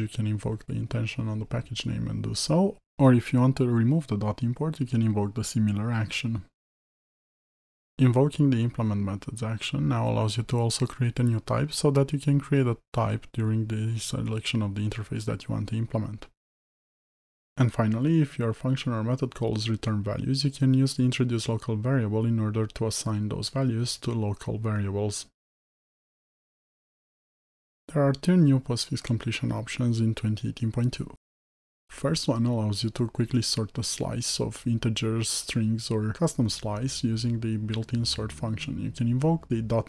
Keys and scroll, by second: 8.2 ctrl+i, 18.6 alt+Return, 22.5 Return, 35.6 Return.